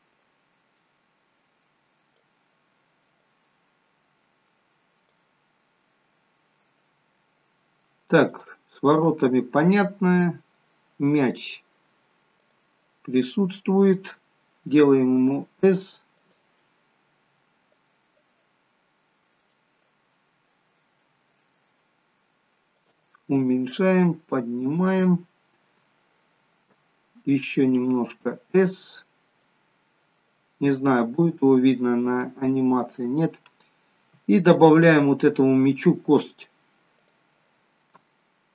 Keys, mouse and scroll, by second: 3.3 click, 5.7 middle click, 8.4 click, 8.9 middle click, 12.5 click, 15.0 s, 16.2 click, 19.5 click, 20.9 s, 23.8 click, 25.4-25.9 scroll up 4, 25.9 shift+middle click, 27.8 s, 30.4 click, 32.5 click, 33.7-34.3 scroll down 1, 34.3-35.3 scroll up 1, 35.3 scroll up 4, 35.4-35.9 scroll down 1, 37.1 click.